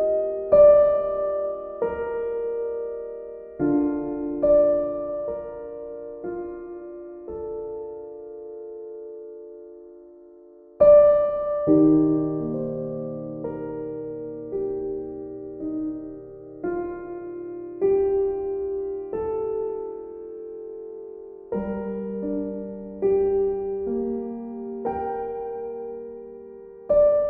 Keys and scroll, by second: 0.1 ctrl+z.